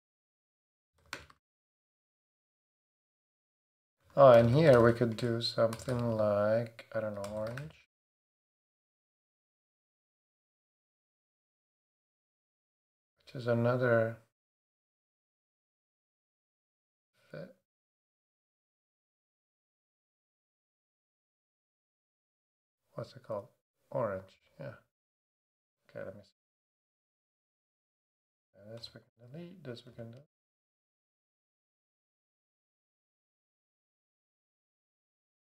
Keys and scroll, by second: 0.0-5.7 typing, 6.9-13.5 typing, 28.8 BackSpace, 30.3 super+BackSpace.